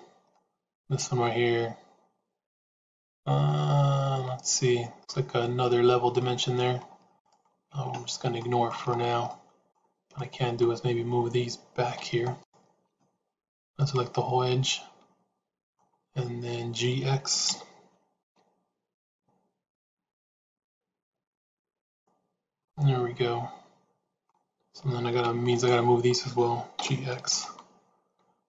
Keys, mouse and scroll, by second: 0.2-4.9 middle drag, 4.9-6.1 scroll up 1, 6.1 middle click, 7.1 click, 7.7 Tab, 8.3 shift+middle click, 9.2 middle click, 10.1 click, 12.1 alt+click, 12.9-15.7 middle drag, 17.3 g, 22.5-24.2 middle drag, 25.4 alt+click, 26.7 g.